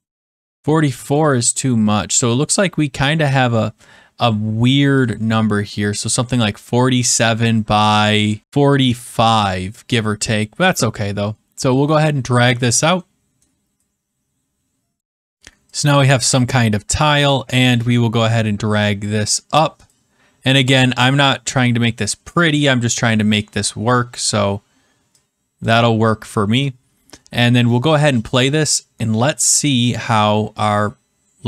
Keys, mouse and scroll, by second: 1.1 click, 1.2 click, 4.9 click, 8.2 click, 9.9-10.8 scroll, 10.9-11.4 scroll, 12.6 click, 13.3-13.8 scroll, 14.9 click, 15.7 click, 16.9-17.3 scroll, 17.9-18.5 scroll, 20.6 click, 21.0-21.6 scroll, 25.6-29.4 drag.